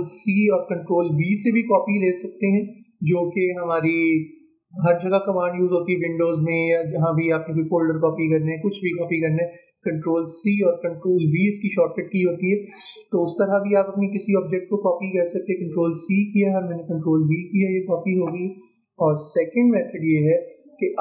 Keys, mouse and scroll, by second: 0.1 ctrl+c, 1.2 ctrl+v, 12.9-14.4 drag, 14.4 ctrl+c, 16.5 ctrl+v, 20.2-21.0 drag.